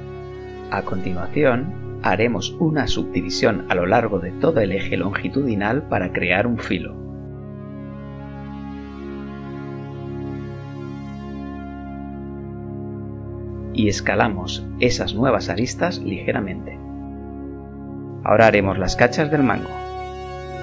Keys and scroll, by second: 3.4 ctrl+r, 17.5 ctrl+r, 18.5 ctrl+r, 20.0 z.